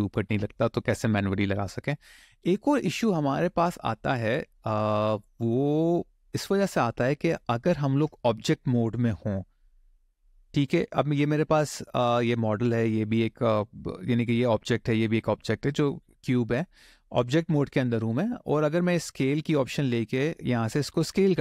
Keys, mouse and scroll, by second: 8.9-10.3 scroll down 2, 10.3 click, 11.3 middle click, 12.8 click, 13.6-14.0 scroll up 1, 14.8 click, 19.3 click, 20.8 click.